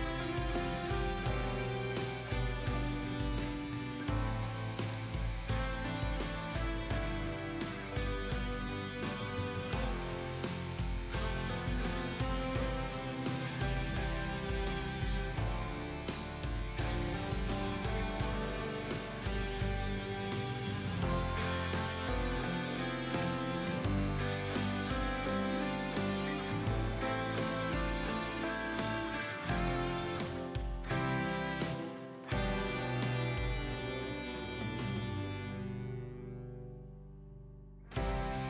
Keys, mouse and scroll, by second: 3.2 ctrl+r, 3.2 ctrl+r, 3.5 click, 6.1-6.5 scroll up 1, 6.5 click, 9.9 shift+click, 15.1 click, 16.3 scroll down 1, 16.8-17.1 scroll up 1, 17.1 click, 20.5 click, 22.4 ctrl+a, 22.9 KP_1, 23.4 KP_6, 23.8-26.3 drag, 26.5 click, 27.0-27.3 scroll down 1, 27.3 scroll up 1, 27.8-30.1 drag, 32.7 shift+click, 34.1 click, 34.3 ctrl+a, 34.4 ctrl+a, 35.0 KP_1, 35.8 click, 37.0 shift+click, 38.0 click.